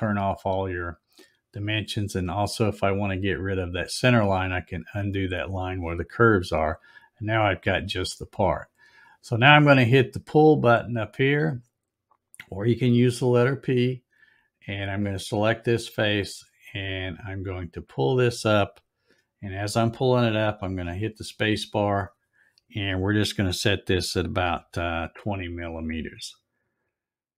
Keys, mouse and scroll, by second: 2.9 click, 11.7 click, 16.1-20.9 drag, 20.7 space.